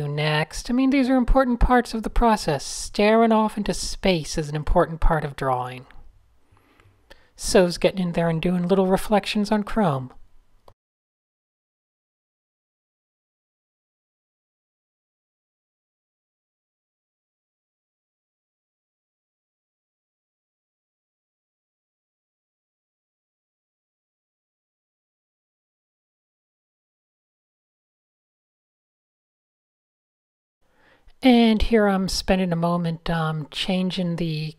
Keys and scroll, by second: 3.1 super+z, 3.2 Tab, 3.5 Tab, 4.3-7.5 typing, 4.4 Tab, 4.6 super+0, 7.7 super+1, 8.2 super+0, 8.5 a, 8.7 Tab, 10.8-14.1 typing, 16.0 super+z, 16.5 Tab, 17.6 super+h, 20.3 super+z, 21.1 super+z, 23.0 super+z, 23.1 super+z, 23.1 a, 23.5 Tab, 24.6 Tab, 25.1 shift+super+a, 25.1 typing, 28.4 Tab, 28.5 typing, 29.0 fn+F2, 29.4 shift+super+a, 30.8 fn+F10, 31.8 alt+shift+super+a.